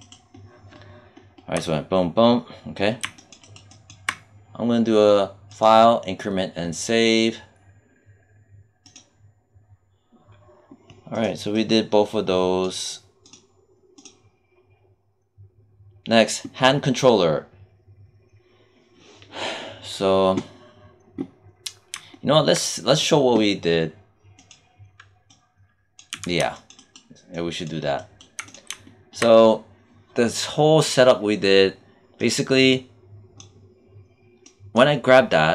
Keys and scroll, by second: 26.0 z.